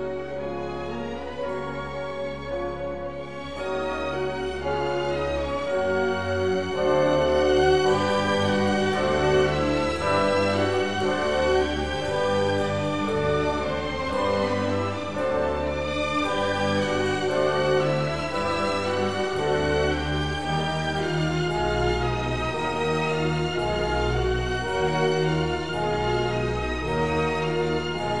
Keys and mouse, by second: 2.1 click, 2.8 ctrl+r, 4.0 KP_Enter, 4.7 s, 4.8 z, 6.8 click, 8.1 ctrl+r, 9.2 KP_Enter, 9.6 s, 9.8 z, 12.7 click, 13.7 ctrl+r, 15.6 KP_Enter, 15.9 s, 16.8 z, 19.8 click, 21.5 ctrl+r, 23.7 KP_Enter, 24.6 s, 24.7 x, 25.7 click.